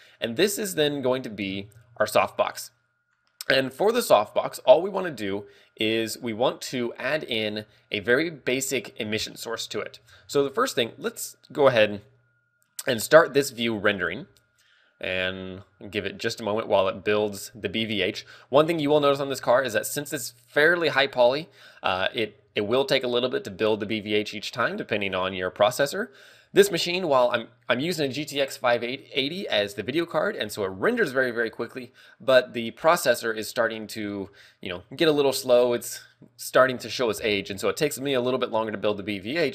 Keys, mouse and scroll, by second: 7.2 shift+space, 7.8 shift+middle click, 9.0 scroll up 3, 9.8 scroll up 2, 12.4 click, 16.6 ctrl+w.